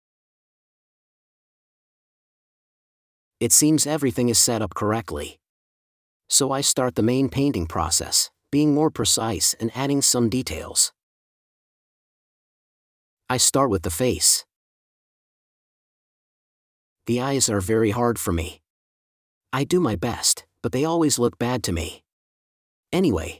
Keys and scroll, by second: 1.8 space, 2.3 super+space, 10.3 space, 12.3 4.